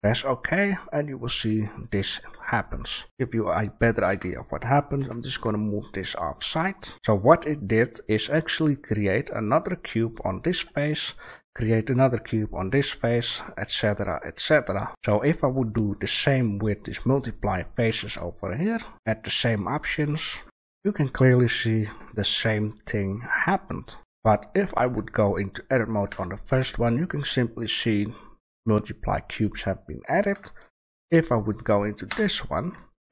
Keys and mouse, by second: 1.1 click, 1.7-4.1 middle drag, 4.1 g, 6.4 a, 6.8 right click, 13.5-14.4 middle drag, 14.9 ctrl+z, 14.9 a, 17.9 shift+a, 20.4 g, 20.4 a, 23.0-24.5 middle drag, 24.5-26.0 right drag, 26.0 Tab, 28.7 middle click, 29.0 middle click, 29.5 middle click, 30.3 Tab, 32.0 Tab.